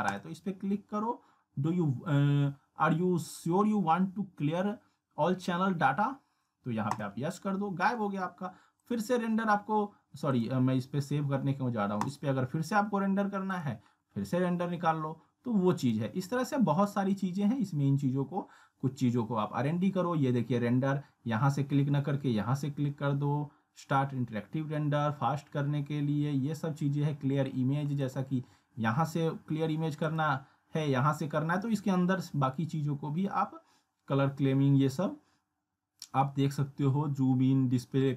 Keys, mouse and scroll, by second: 0.2 click, 7.0 click, 15.9 click, 28.1 click.